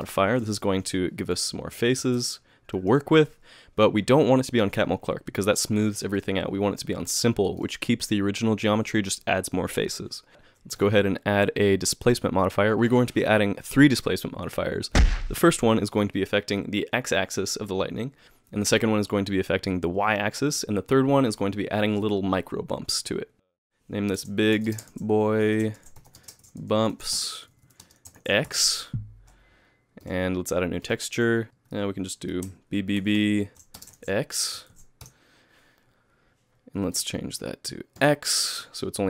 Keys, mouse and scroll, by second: 1.7 KP_Add, 2.7 shift+middle click, 6.2 click, 7.6 click.